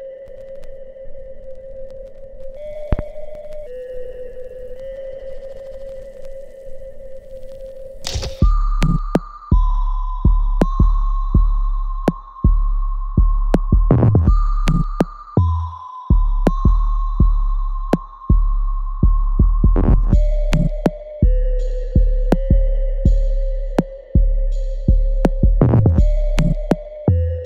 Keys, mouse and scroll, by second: 4.0 click, 6.8-9.9 right drag, 9.9 click, 12.7 click, 14.2-15.8 ctrl+drag, 15.8 click, 16.8-23.2 ctrl+drag, 23.2 click, 26.0-27.4 ctrl+drag.